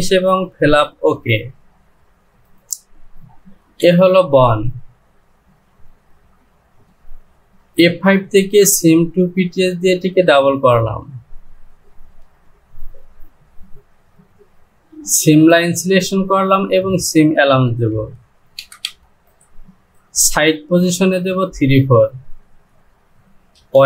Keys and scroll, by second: 1.1 j, 3.7 Home, 18.0 Down, 18.8 Down, 22.4 Down.